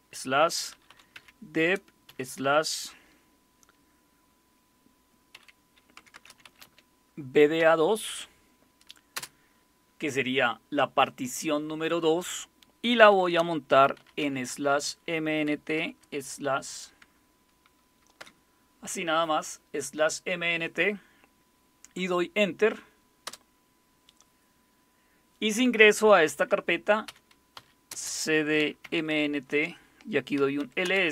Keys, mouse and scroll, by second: 0.0-2.1 typing, 5.1-7.6 typing, 9.2 typing, 13.1-15.8 typing, 18.2 typing, 23.3 Return, 27.1-31.1 typing.